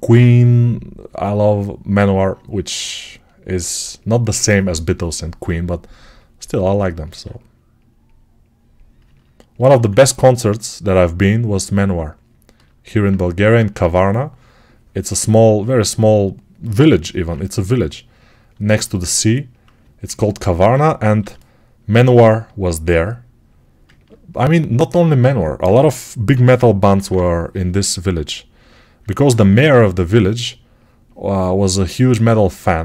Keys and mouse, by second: 8.9-32.8 ctrl+alt+right drag, 9.6 1, 21.1 g, 26.2 p, 26.7 [, 26.9 [, 29.2 1.